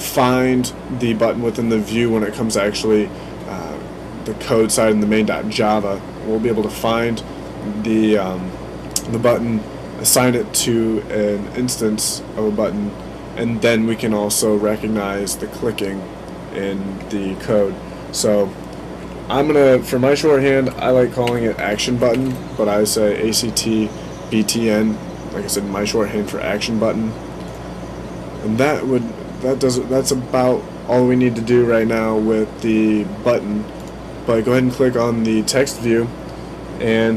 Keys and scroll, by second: 20.4-22.6 typing.